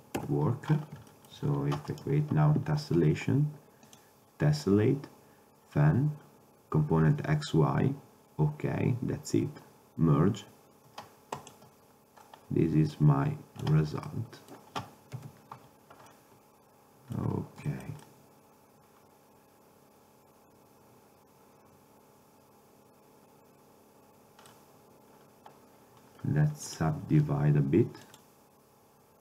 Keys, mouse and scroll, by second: 0.3 KP_7, 4.0-9.0 drag, 13.0-13.7 drag, 14.2-14.9 middle drag, 15.2 KP_Decimal, 18.3 middle click, 18.5 middle click, 18.7 middle click, 18.9-19.8 middle drag, 19.8 middle click, 22.2 middle click, 23.0 middle click, 24.7 middle click, 26.8 drag.